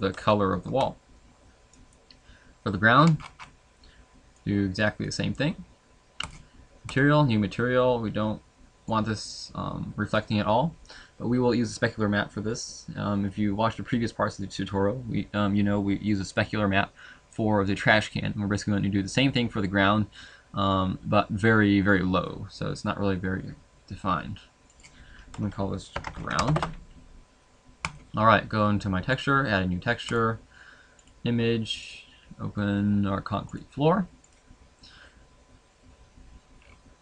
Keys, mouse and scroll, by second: 0.3 shift+middle click, 1.7 right click, 7.0 click, 8.9 click, 26.5 click, 29.2 click, 31.0 click, 35.9 click.